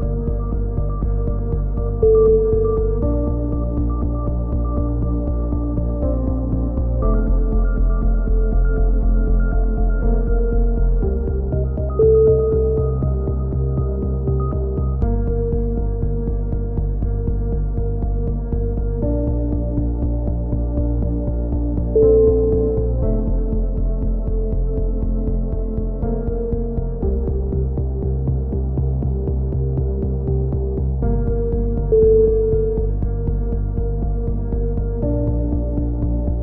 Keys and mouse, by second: 2.4 click, 2.9 KP_3, 3.4 click, 4.2 c, 5.2-6.3 drag, 6.3 middle click, 7.2-8.5 drag, 8.5 middle click, 8.9 right click, 9.2 e, 9.5 middle click, 10.0-11.2 drag, 11.2 KP_3, 11.4 middle click, 12.1 click, 12.7 a, 13.1-16.2 drag, 13.7 f, 13.9 a, 16.0 f, 16.2-17.2 middle drag, 16.2 a, 18.9 click, 19.9 KP_7, 20.9 middle click, 21.8 click, 23.0 ctrl+z, 23.9-24.9 drag, 24.9-26.0 middle drag, 25.8 z, 26.0 click, 26.8 a, 26.9 middle click, 27.1-29.2 drag, 29.8 click, 30.1-32.4 typing, 33.1 click, 34.4 click, 35.1 middle click, 35.6 z.